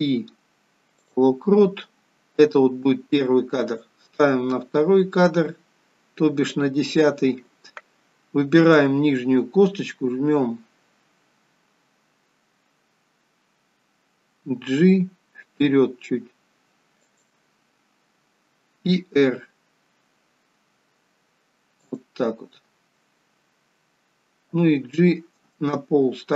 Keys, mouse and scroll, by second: 3.8 click, 8.5 click, 14.6 g, 19.1 r, 24.3 g.